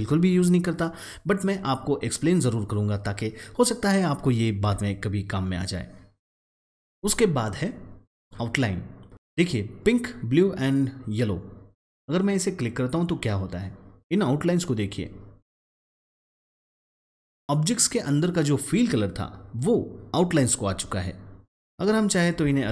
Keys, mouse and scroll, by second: 15.8 click, 21.7 click, 22.6 ctrl+z.